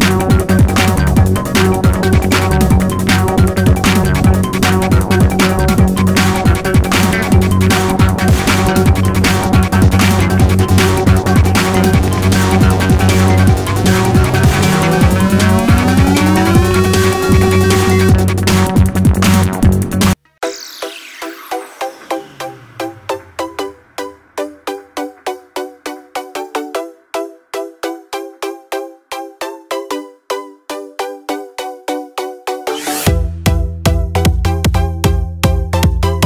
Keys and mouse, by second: 5.9 click, 10.6 click, 15.3 n, 16.7 click, 18.7-20.1 drag, 19.5 middle click, 21.3-23.8 drag, 25.3 click, 29.7-32.4 drag, 32.4-33.4 middle drag, 33.4-36.2 drag, 35.7 KP_0.